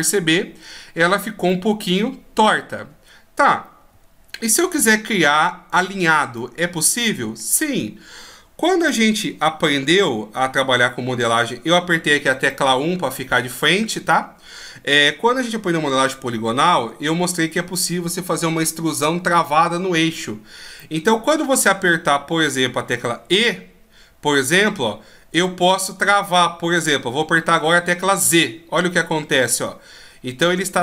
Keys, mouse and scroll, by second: 1.4 middle click, 4.7 ctrl+z, 5.2 ctrl+z, 6.3 middle click, 10.0 KP_1, 12.4 middle click, 14.0 middle click, 20.7 middle click, 23.2 e.